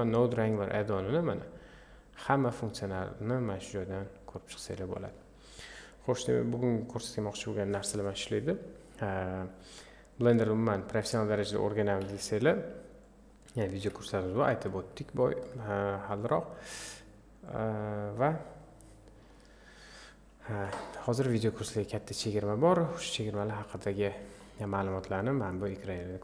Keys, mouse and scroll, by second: 12.1 Delete, 13.1 click, 13.9 Delete, 14.2-15.5 middle drag, 15.5 click, 17.5 click, 22.1 click.